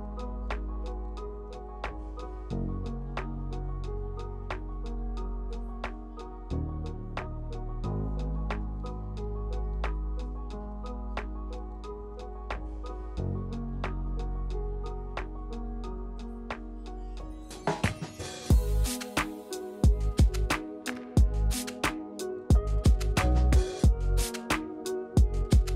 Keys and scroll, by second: 0.6 Tab, 0.8 space, 4.7 r, 7.5 r, 10.9 e, 11.7 e, 13.9 r, 15.3 e, 18.6-19.6 typing, 21.1 r, 24.9 r.